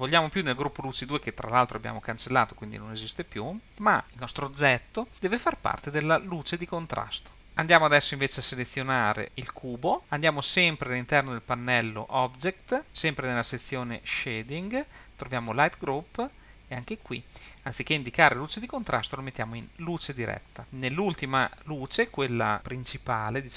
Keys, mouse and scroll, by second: 3.3 click, 5.1-7.1 drag, 7.5 click, 8.9 click, 13.7-17.0 scroll down 2, 17.0-20.0 drag, 21.7 click, 22.5 click.